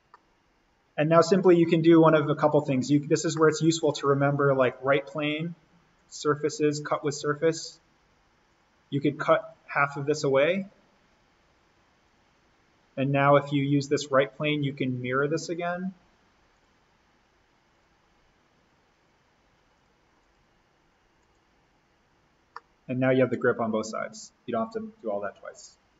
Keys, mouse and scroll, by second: 2.8 click, 3.2 scroll up 1, 3.3 middle click, 4.6 click, 22.5-25.9 middle drag.